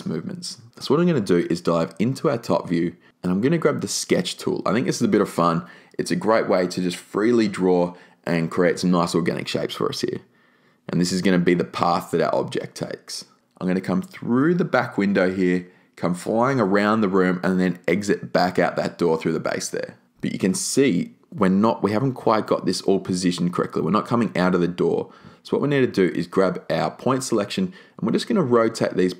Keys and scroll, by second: 22.7 r, 25.3 e.